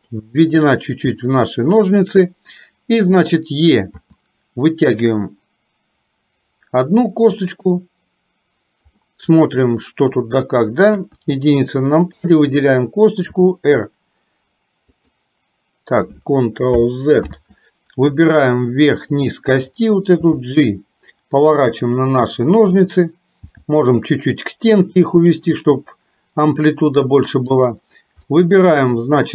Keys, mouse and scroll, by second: 4.1 e, 9.1-10.2 middle drag, 10.9 KP_1, 12.2 click, 13.3 r, 17.3 ctrl+z, 19.2 click, 20.2 g, 23.6 g, 27.6 click, 28.3-29.3 middle drag.